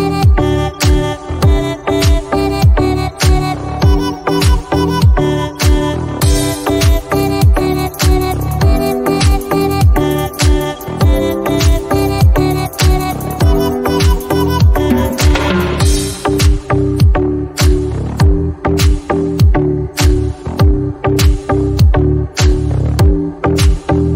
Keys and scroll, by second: 2.6 ctrl+g, 12.8 ctrl+t.